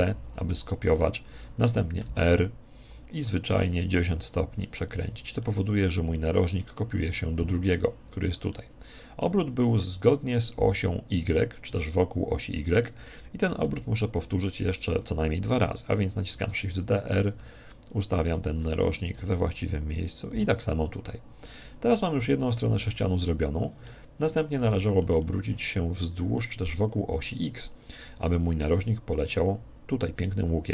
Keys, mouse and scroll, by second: 5.0 click, 5.4-8.3 middle drag, 8.5-11.3 middle drag, 13.7 KP_1, 16.3 shift+d, 18.0 click, 20.4 click, 21.5-23.2 middle drag, 23.9-28.1 middle drag.